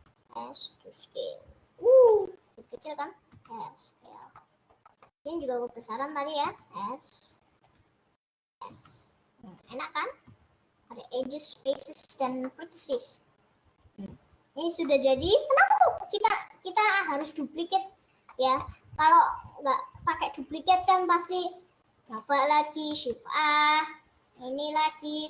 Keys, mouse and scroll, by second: 0.0 s, 2.8 click, 3.0 click, 3.5 s, 4.4-5.8 middle drag, 5.8 click, 6.0 click, 6.4 s, 8.2 click, 8.7 s, 10.4 s, 12.1 click, 12.6-14.1 middle drag, 14.1 scroll up 1, 14.2 scroll down 1, 14.9-16.3 middle drag, 16.3-17.1 scroll down 2, 17.1-19.7 middle drag, 19.7 scroll up 2, 20.1 scroll down 2, 20.7-21.2 scroll down 2, 21.2 scroll up 1, 22.5 click, 24.9 click.